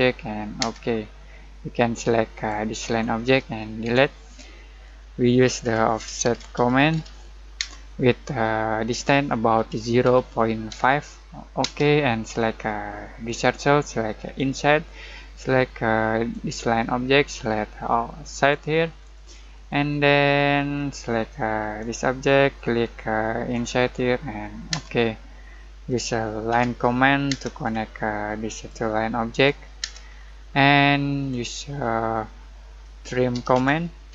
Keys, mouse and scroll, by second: 0.6 space, 1.0 scroll down 1, 1.5 middle click, 2.3 click, 3.8 Delete, 5.6-7.5 typing, 9.7-11.6 typing, 12.2 scroll up 1, 13.2 click, 18.8 scroll down 1, 19.1 middle click, 20.7-21.7 scroll up 1, 21.7 click, 24.7 space, 25.5-26.5 scroll up 1, 26.5 l, 27.3 space, 27.6 scroll up 1, 28.5 click, 29.8 space, 30.0 scroll down 1, 30.5 middle click, 31.0 scroll up 1, 33.1-34.1 typing.